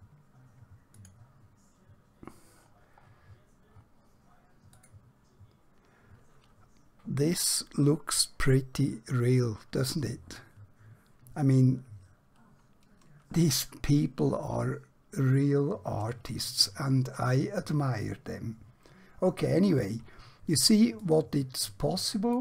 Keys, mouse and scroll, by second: 2.7-4.8 scroll down 1, 4.8 click, 20.9 click.